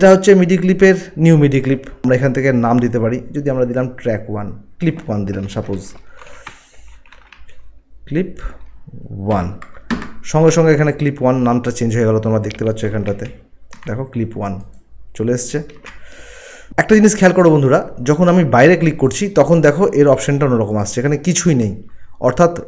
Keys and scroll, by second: 6.3-7.3 typing, 9.2 1, 9.9 Return, 13.1 ctrl+1, 13.3 ctrl+1, 15.8 Return.